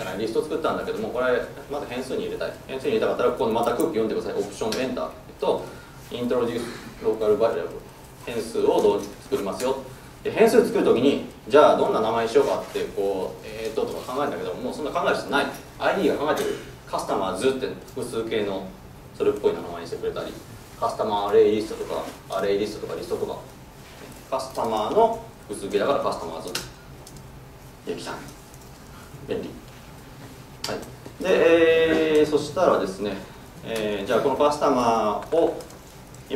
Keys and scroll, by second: 4.8 alt+Return, 26.7 Return.